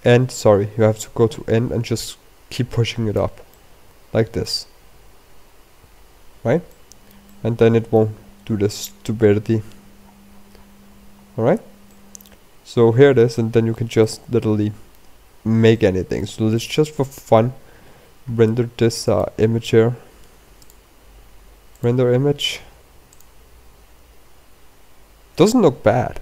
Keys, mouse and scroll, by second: 0.3 click, 4.5 middle click, 7.7 shift+middle click, 8.3 middle click, 9.0-10.5 scroll down 16, 10.8-12.0 scroll up 25, 12.2-12.7 scroll down 6, 12.9 middle click, 14.3 shift+middle click, 15.0 middle click, 16.7 shift+middle click, 17.6 middle click, 20.0 click, 21.6 click.